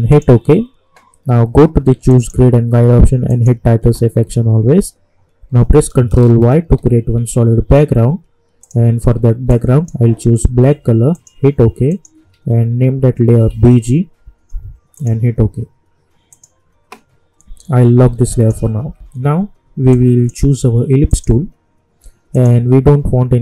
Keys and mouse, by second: 0.1 click, 6.0 ctrl+Num_Lock, 6.0 click, 6.5 ctrl+y, 8.6-11.1 drag, 12.3 ctrl+a, 13.0-14.0 typing, 14.9 click, 19.9-23.4 drag.